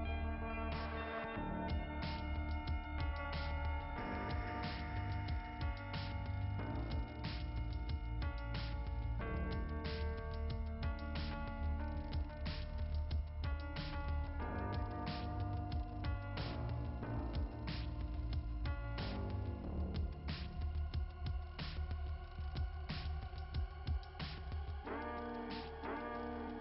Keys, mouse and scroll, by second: 6.1 click, 6.4 click, 6.8 click, 7.1 click, 8.5 click, 9.2 right click, 10.3 click, 11.5 right click, 13.3 click, 14.2 click, 16.1 click, 18.9-20.1 scroll down 2, 20.3 click, 22.3 click, 22.6 click, 24.0 click, 26.1 click.